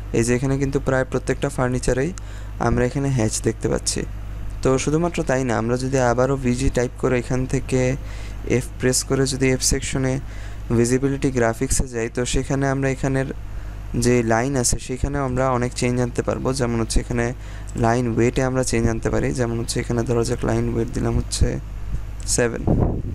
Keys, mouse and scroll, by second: 1.3 scroll down 1, 3.4-5.3 scroll up 1, 5.8-6.7 typing, 7.5-8.2 scroll down 1, 8.2 f, 8.6-11.0 scroll down 1, 15.2 click, 22.1 click, 22.6 click.